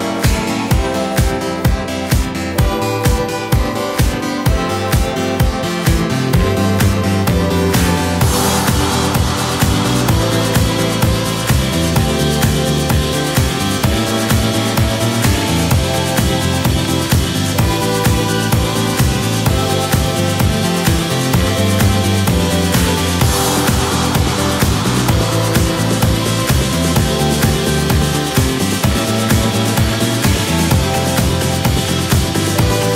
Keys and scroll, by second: 3.3-6.8 typing, 9.9-10.6 typing, 15.9 super+d, 16.8 super+v, 27.9 super+c, 28.0 super+v.